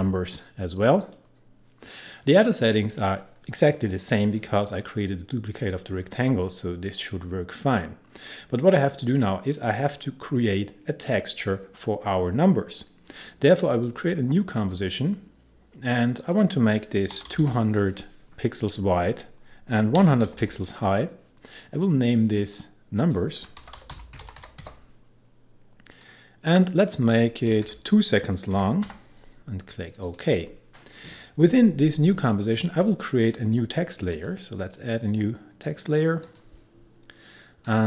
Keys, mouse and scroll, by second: 0.0-0.5 typing, 1.0 click, 7.6-9.5 scroll down 1, 13.9 click, 16.9-17.9 typing, 19.1 click, 19.8-20.9 typing, 22.1 click, 23.4-25.1 typing, 26.0 click, 27.5 BackSpace, 28.5-28.9 typing, 30.1 click, 31.0-32.8 scroll up 1, 34.2 click.